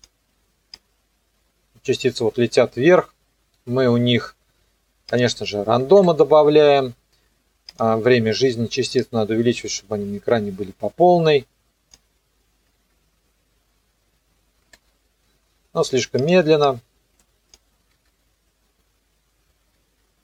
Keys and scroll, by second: 5.8 KP_4, 5.9 KP_Enter, 12.7 KP_0, 17.9 KP_0, 19.8 KP_0.